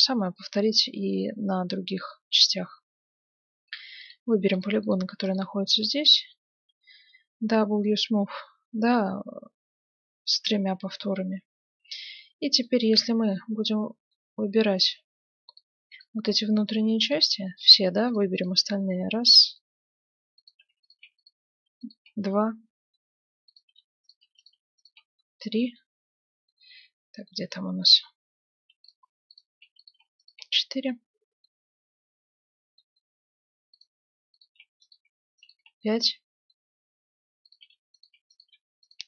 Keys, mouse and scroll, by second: 2.3 Tab, 4.0-7.0 right drag, 6.6 w, 10.7-11.1 scroll up 1, 11.1-12.8 middle drag, 13.2 middle click, 14.0 middle click, 17.7-20.1 right drag, 18.8-20.5 middle drag, 20.5-26.6 right drag, 22.3-24.1 middle drag, 25.2-29.8 middle drag, 28.9-31.9 right drag, 30.9-34.4 middle drag, 34.4-37.0 right drag, 35.8-37.5 middle drag, 37.5-39.0 right drag.